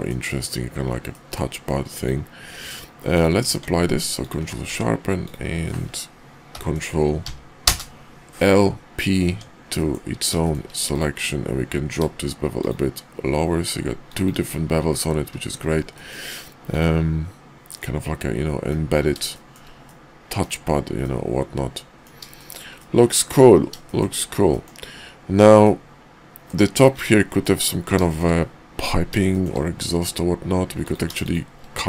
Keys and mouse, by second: 1.0-1.4 middle drag, 1.9 click, 2.4 q, 3.4 q, 4.7 Tab, 5.2 click, 6.5 ctrl+l, 7.2 p, 9.3 Tab, 9.7 middle drag, 10.4 shift+middle drag, 11.6 q, 15.9 drag, 16.6 click, 17.6-18.7 middle drag, 19.3 shift+middle click, 19.8-20.4 middle drag, 21.0-22.0 middle drag, 22.3 shift+middle drag, 22.8-23.3 middle drag, 23.9 shift+middle drag, 24.5 middle drag, 25.6-26.5 middle drag, 27.4 KP_5, 28.1 shift+middle click, 29.3 shift+middle drag, 30.7 click, 31.2 shift+click.